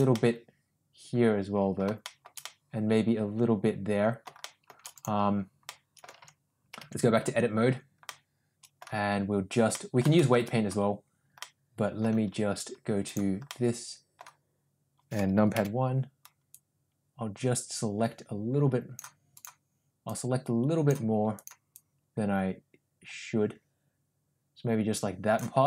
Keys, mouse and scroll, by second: 0.1-1.8 middle drag, 2.0 shift+middle drag, 2.5-4.2 middle drag, 4.4 shift+middle drag, 4.9 click, 5.7-6.0 middle drag, 6.4 Tab, 7.0 Tab, 7.5 Tab, 8.1 middle click, 9.7 middle click, 10.2 shift+middle click, 11.4 middle click, 13.1 click, 13.5 middle click, 15.6 KP_1, 16.6-19.1 drag, 19.4 click, 20.1 click, 21.9-25.5 drag.